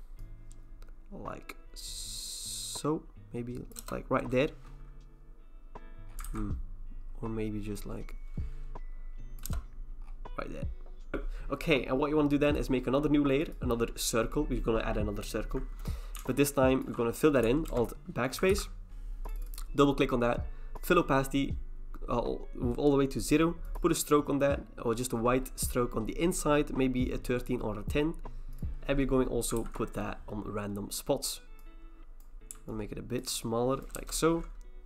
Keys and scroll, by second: 3.8 Return, 6.2 ctrl+t, 9.4 Return, 17.7 alt+BackSpace, 18.5 ctrl+d, 29.6 ctrl+t, 33.9 Return.